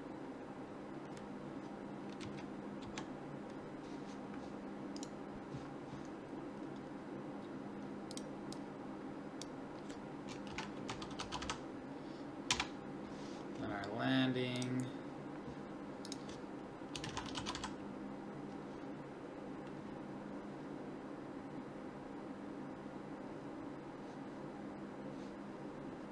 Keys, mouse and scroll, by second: 2.2 Right, 2.8 Left.